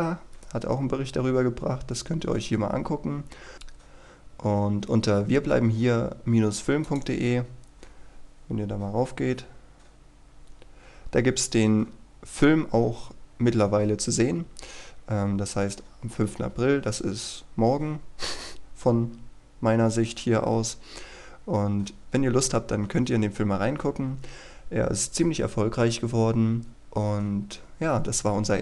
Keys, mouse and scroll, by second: 2.6-3.9 scroll up 1, 3.9-6.7 scroll down 1, 6.7-7.9 drag, 10.5-12.3 scroll down 1, 12.3-17.5 scroll up 1, 20.9-22.1 scroll down 1, 22.1-25.1 scroll up 1, 25.1-27.5 scroll down 1, 27.5-28.6 scroll up 1.